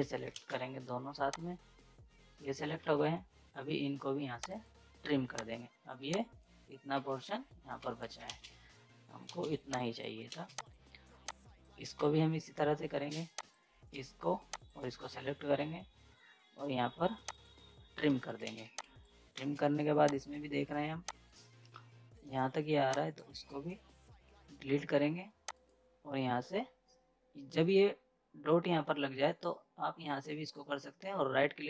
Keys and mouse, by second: 0.0 right click, 1.3-2.8 drag, 2.8 ctrl+z, 4.4 click, 6.9 ctrl+z, 7.8 z, 8.0 right click, 8.3 ctrl+space, 8.5 z, 9.0 right click, 9.3 ctrl+space, 9.5 z, 9.7 click, 10.3 ctrl+space, 10.6 click, 11.9 ctrl+z, 13.3 click, 13.4 click, 14.5 shift+click, 18.1 z, 18.3 right click, 18.4 space, 18.6 z, 18.8 click, 19.3 ctrl+space, 20.1 click, 21.7 F10, 22.9 click, 25.5 click.